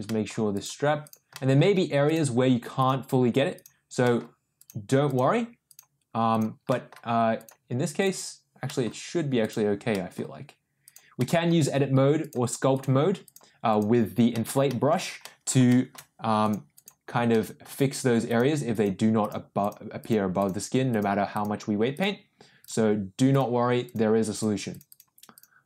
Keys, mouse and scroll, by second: 0.0 middle click, 0.5 click, 1.0 click, 1.3 middle click, 2.0 click, 2.8 click, 3.5 click, 4.0 middle click, 4.5 click, 5.0 click, 5.6 click, 6.3 click, 6.6 middle click, 7.3 click, 7.9 click, 8.6 middle click, 9.4 click, 9.9 middle click, 10.8 click, 11.1 middle click, 12.1 click, 12.7 click, 13.2 click, 13.6 click, 14.3 middle click, 14.6 shift+middle click, 15.2 middle click, 15.6 shift+middle click, 16.4 click, 16.7 click, 17.3 middle click, 18.2 click, 18.7 click, 19.2 click, 19.6 click, 20.0 click, 20.5 click, 20.9 click, 21.3 click, 21.9 click, 22.6 click, 23.3 click, 23.8 click, 24.3 click, 24.7 click, 24.8 click, 25.3 click.